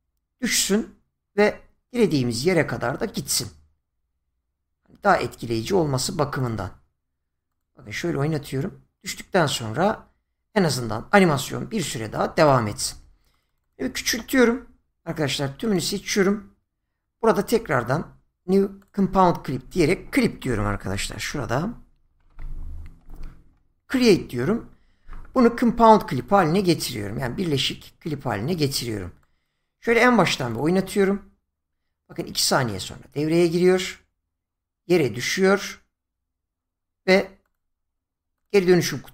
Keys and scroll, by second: 20.4 Caps_Lock, 20.7-22.3 typing.